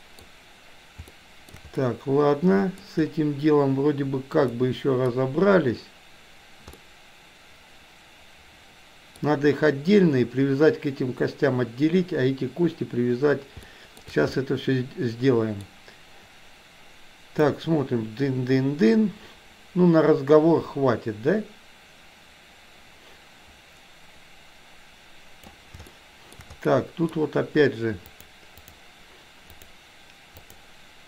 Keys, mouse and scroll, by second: 1.1-1.7 shift+middle drag, 2.0-3.0 middle drag, 4.7-5.3 middle drag, 6.8-9.3 middle drag, 13.8 shift+middle click, 14.5-15.7 middle drag, 17.5-25.7 drag, 26.0-26.5 shift+middle drag, 26.8 middle click, 28.2-28.8 drag, 29.6 click, 30.3 click.